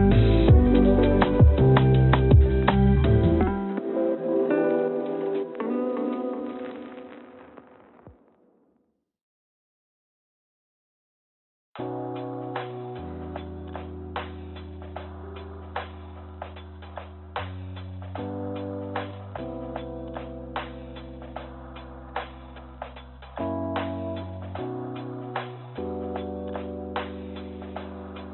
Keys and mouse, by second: 4.7-6.2 drag, 7.3 shift+d, 10.3 shift+d, 12.2 shift+d, 15.8 s, 18.3 g, 22.6 g.